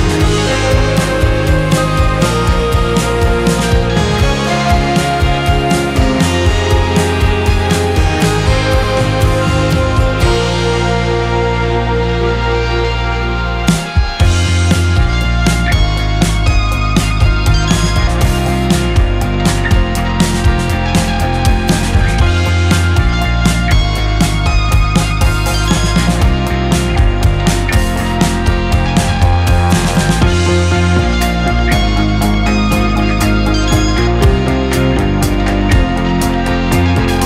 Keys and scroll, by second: 6.3 space, 11.4 space, 11.7 2, 16.7 2, 34.3 1.